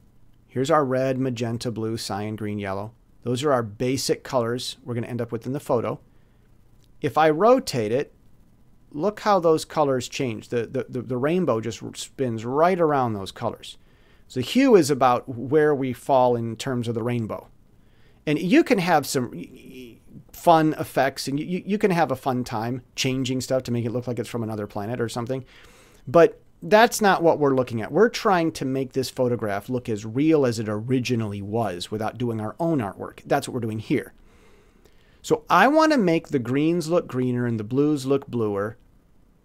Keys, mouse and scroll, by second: 7.3-11.2 drag, 14.0-15.0 drag, 17.6-19.9 drag, 26.4 click.